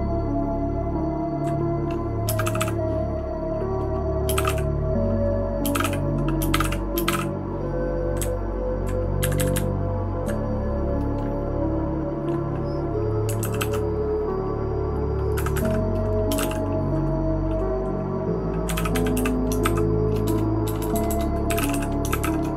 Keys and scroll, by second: 2.2 space, 2.4 h, 2.6 h, 4.1-7.7 typing, 8.2 Down, 8.7 Down, 8.7 Down, 8.8 Down, 9.2 Up, 9.4 Up, 9.5 Up, 10.0 Up, 10.1 Up, 10.2 Up, 13.4 ctrl+w, 13.6 ctrl+w, 15.4 Escape, 15.6 Escape, 16.1-16.9 typing, 18.4-20.1 typing, 20.2 shift+Tab, 20.6 shift+Tab, 20.8 shift+Tab, 20.9 shift+Tab, 21.1 shift+Tab, 21.2-22.5 typing.